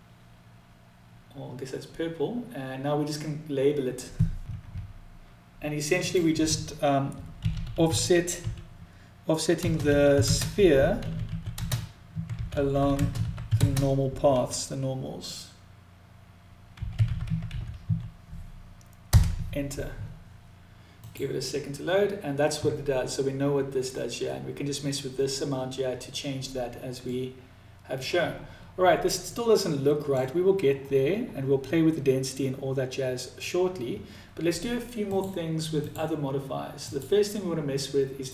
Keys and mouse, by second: 5.6-20.8 drag, 7.1 f, 26.7-27.6 middle drag, 28.9-29.8 middle drag, 34.5 click, 35.5 click, 36.4-38.3 drag.